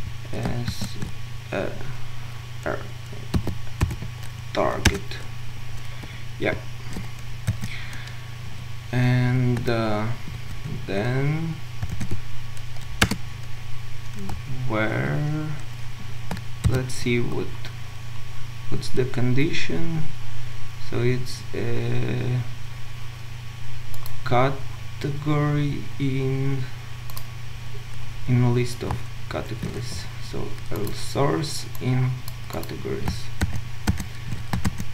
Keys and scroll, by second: 0.7 ctrl+alt+Right, 4.9 Return, 13.0 Return, 16.6 Return, 16.7 ctrl+u.